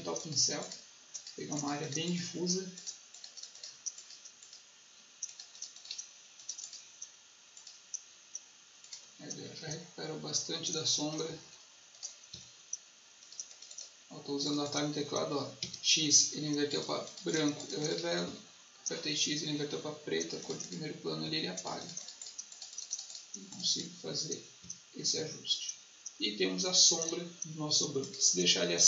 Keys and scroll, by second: 9.6 x, 11.2 b, 12.2 x, 15.5 x, 18.2 x, 21.1 x, 24.5 x.